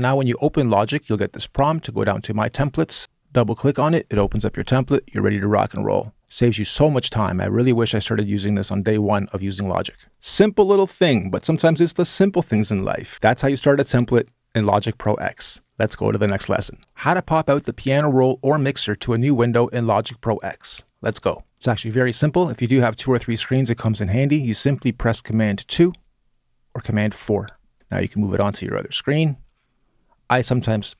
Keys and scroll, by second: 25.4 super+2, 26.9 super+4.